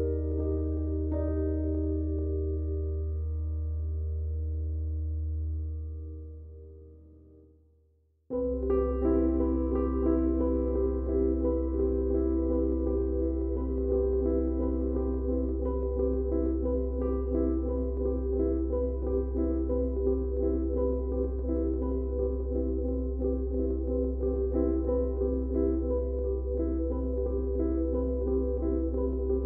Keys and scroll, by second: 19.7 F1, 21.7 F1, 29.1 F1.